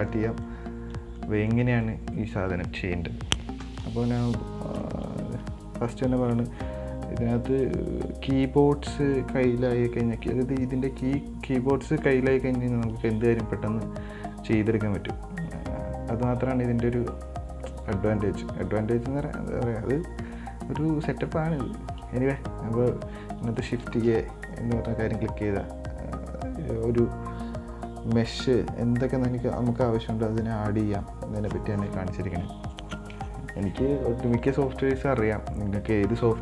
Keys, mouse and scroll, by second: 0.1 middle click, 0.5 scroll up 4, 0.7 middle click, 1.6 scroll up 3, 1.7-3.8 middle drag, 3.8 KP_1, 4.3 Tab, 5.0-8.0 shift+middle drag, 24.1 shift+a.